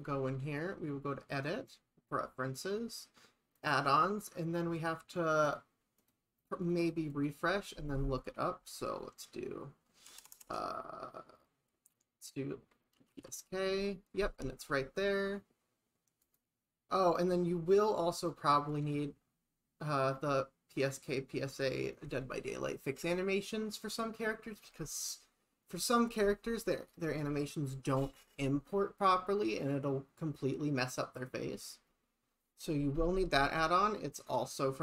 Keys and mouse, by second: 0.7-2.7 drag.